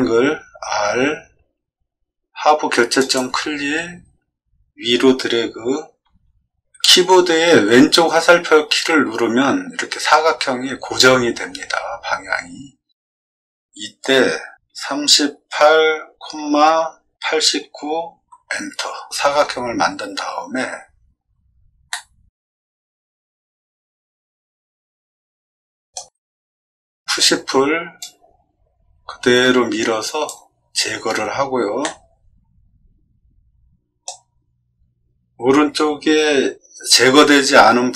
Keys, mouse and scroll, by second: 0.1 r, 2.9 click, 14.6-17.5 typing, 18.2 Return, 21.9-25.9 middle drag, 27.1 p, 28.0-30.2 drag, 31.8-34.0 middle drag.